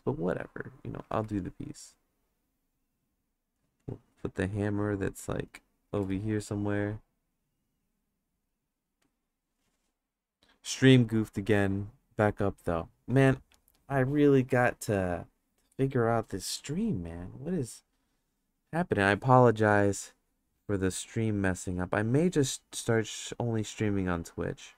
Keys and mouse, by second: 1.1 ctrl+z, 1.3-2.7 drag, 3.1 click, 3.8 click, 4.6 click, 6.0 ctrl+z, 6.4 click, 7.3 click, 19.6 click, 21.4 click, 24.1 click.